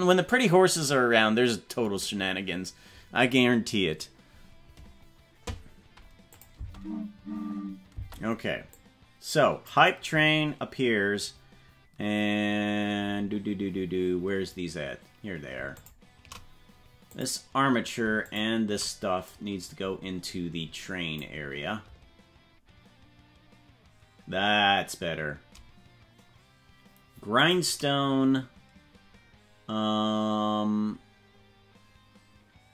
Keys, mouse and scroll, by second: 6.4 click, 6.6 space, 8.1 space, 8.8 click, 13.1-14.1 scroll down 15, 15.8 shift+click, 17.1 click, 18.2 shift+click, 19.3-21.3 drag, 19.9-20.7 scroll up 10, 27.4 click.